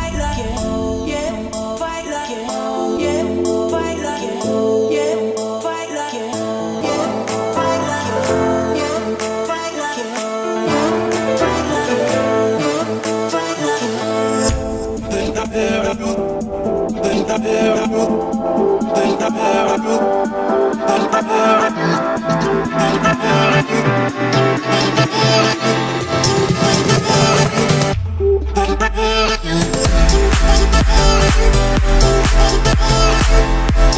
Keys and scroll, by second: 17.8 Escape, 19.6 o, 31.6 Escape, 33.3 Delete.